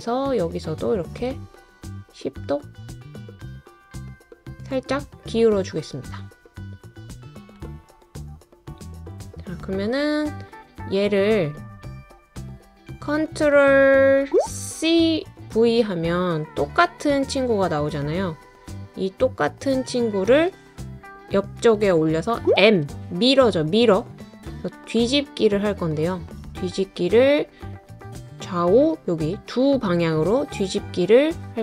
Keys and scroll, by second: 15.2 ctrl+c, 15.5 ctrl+v, 22.6 m.